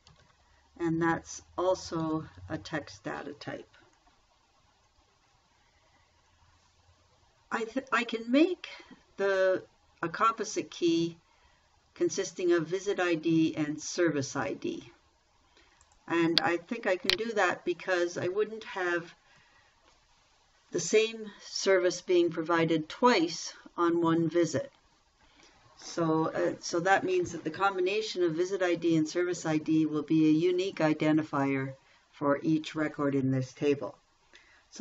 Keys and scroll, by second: 0.0-1.2 typing, 2.5 Tab, 17.6 r.